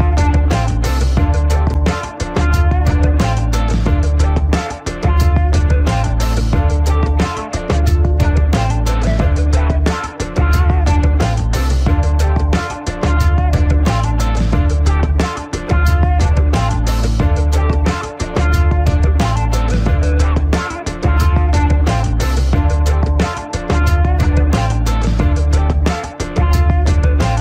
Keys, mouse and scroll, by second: 0.1 scroll up 1, 1.7 ctrl+=, 4.1 click, 6.5 ctrl+j, 7.4 click, 9.4 ctrl+-, 10.6 click, 13.0 click, 17.1 ctrl+click, 18.0 ctrl+alt+shift+e, 20.6 click, 26.7 ctrl+g.